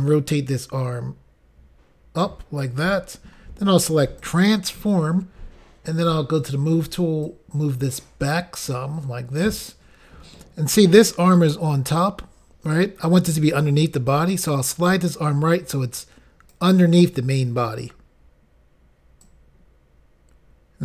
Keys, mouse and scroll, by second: 4.2 click, 6.4 click, 7.3 click, 14.6 click, 19.3 click.